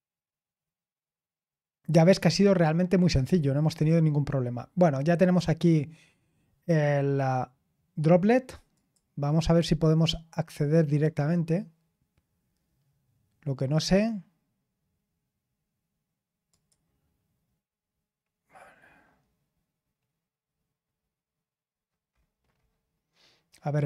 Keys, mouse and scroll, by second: 8.7 click, 16.4 click, 17.8-20.9 scroll down 4, 20.9-21.6 scroll down 1, 21.6-23.7 scroll up 2, 23.7 click.